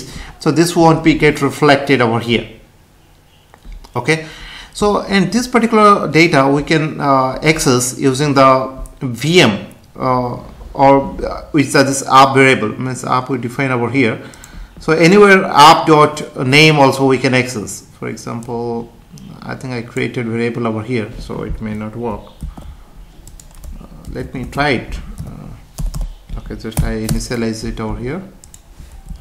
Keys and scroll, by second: 22.4 ctrl+x, 24.0 ctrl+v, 24.5 space, 25.8 BackSpace, 27.0 Return.